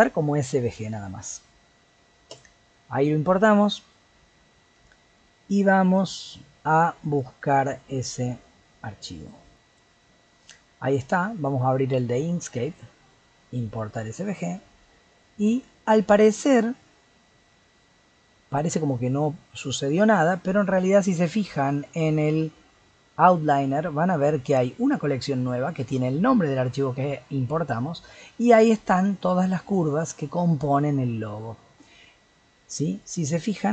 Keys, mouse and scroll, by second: 28.7 click, 29.2 click, 29.6 click, 29.9 click, 33.0 click.